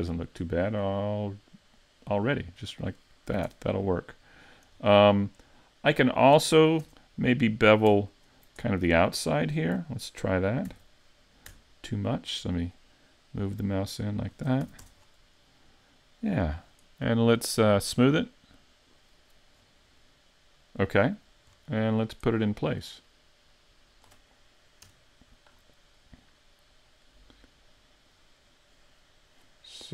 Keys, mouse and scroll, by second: 2.8 click, 3.3 a, 3.5 Tab, 3.7-4.1 scroll down 4, 4.1 middle click, 4.8-5.3 scroll up 4, 5.3 middle click, 6.5 middle click, 6.8 Tab, 8.1 alt+right click, 8.7 middle click, 10.7 ctrl+b, 14.3 shift+click, 14.6 a, 14.8 Tab, 15.0-15.5 scroll down 4, 15.5 middle click, 17.8 click, 18.9 click, 19.6-21.5 scroll up 4, 20.0 middle click, 21.5-22.1 scroll down 5, 23.0 click, 24.8 KP_Decimal, 25.5-26.0 scroll down 3, 26.0 middle click.